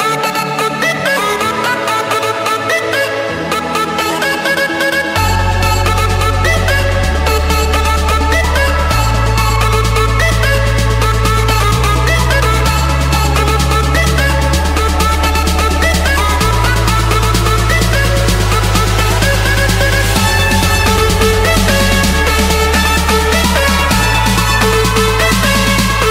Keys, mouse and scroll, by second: 0.2-0.5 scroll down 1, 0.5 Escape, 0.6 scroll, 1.2 middle click, 2.1-2.9 typing, 4.8 Return, 6.9-7.9 drag, 7.9 Return, 11.1-12.6 typing, 13.0 Return, 13.9 Escape, 15.3 click, 17.4-18.6 drag, 21.3-22.5 drag, 23.9 click, 24.3 Escape, 25.5 click.